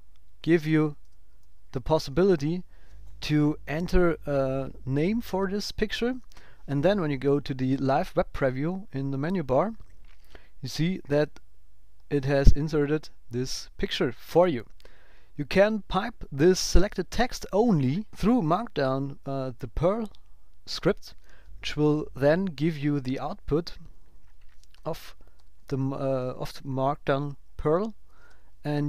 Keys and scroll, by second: 0.4 shift+v, 1.9 shift+p, 6.2 super+s, 23.0 Left, 24.0 shift+Right, 25.1 Down, 27.4 Left.